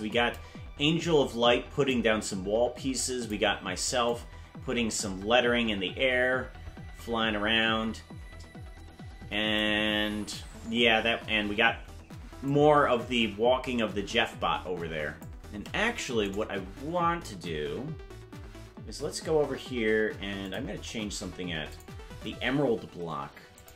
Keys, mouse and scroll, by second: 1.9-3.4 drag, 4.1-9.6 drag, 12.5-15.3 drag, 16.4 right click, 20.4 click, 21.8 click.